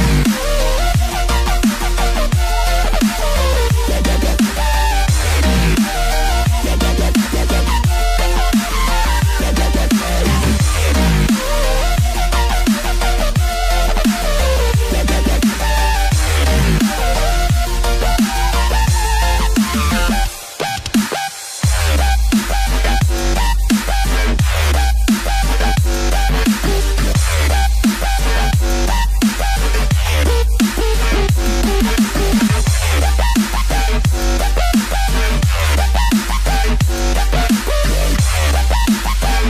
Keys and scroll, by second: 3.1 space, 4.3 space.